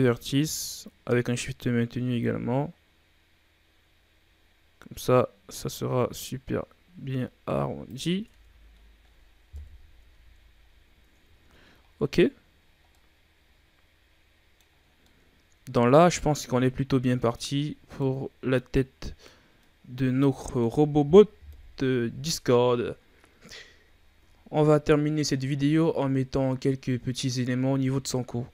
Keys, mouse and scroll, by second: 8.2 Tab, 8.7-9.4 scroll down 5, 9.4 KP_1, 9.9 a, 10.6-11.3 scroll down 1, 11.3 shift+scroll down 1, 11.6-12.3 scroll up 6, 12.3-12.8 scroll down 2, 12.8-14.8 middle drag, 14.8 scroll down 4, 15.0-18.1 middle drag, 18.1-18.5 scroll down 2, 18.5-21.4 middle drag, 21.4 KP_1, 24.3-24.7 shift+scroll down 3, 24.7-27.9 scroll up 4.